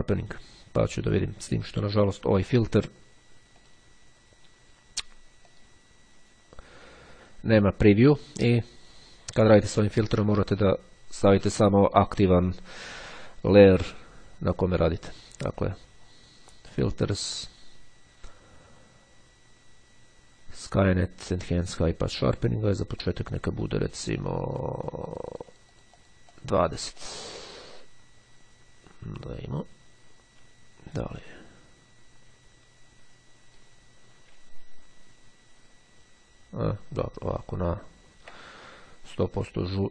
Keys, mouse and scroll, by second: 3.6 click, 5.0-6.1 drag, 14.8 click, 21.6 click, 23.1 click, 24.2-27.0 drag, 27.3 click, 31.0 click, 34.6-35.2 ctrl+scroll down 2, 37.1-37.7 ctrl+scroll up 2.